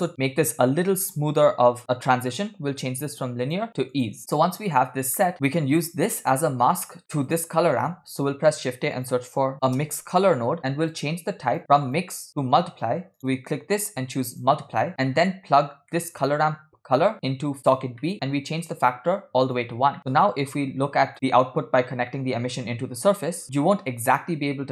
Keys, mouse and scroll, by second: 3.5-4.3 drag, 4.8-5.4 scroll down 4, 5.2 middle click, 5.4 click, 7.0 middle click, 7.4 drag, 8.0 shift+a, 11.9-13.0 drag, 13.2-14.5 drag, 13.2 middle click, 13.2 scroll up 5, 14.9 scroll down 3, 15.1 middle click, 15.8 scroll down 1, 16.1 middle drag, 17.1-17.7 drag, 18.0 middle click, 18.4 scroll up 2, 19.0 click, 20.0 middle click, 20.3 click, 21.1 ctrl+shift+click, 22.3 middle click.